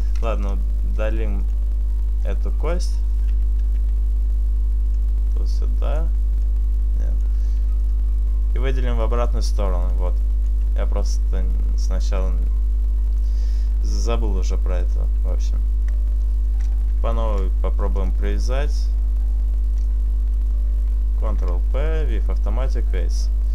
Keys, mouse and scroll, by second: 0.7 right click, 0.9 Delete, 3.7 right click, 6.0 click, 6.5 click, 7.4 e, 7.9 right click, 8.7 click, 10.1 click, 10.9 Tab, 13.6-14.9 scroll down 2, 16.4 shift+right click, 17.3 ctrl+p, 19.8 right click, 20.4 ctrl+right click, 20.9 ctrl+p, 23.4 right click.